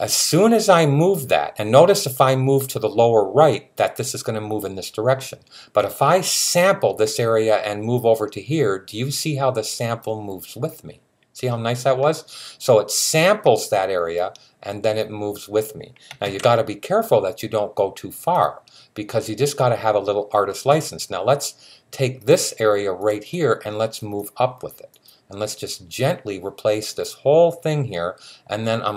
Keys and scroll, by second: 16.0 super+z.